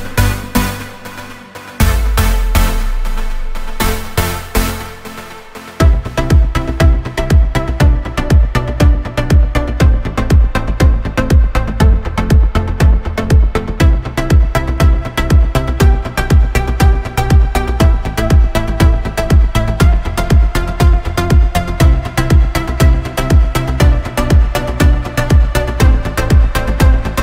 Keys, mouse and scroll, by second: 0.9 Tab, 1.5 g, 2.2 Tab, 2.8-4.8 drag, 4.8 t, 5.9 click, 6.2-7.5 drag, 7.7-17.6 drag, 17.6 Tab, 17.9 shift+f, 19.9 right click, 20.3 shift+d, 21.2 r, 25.1 r.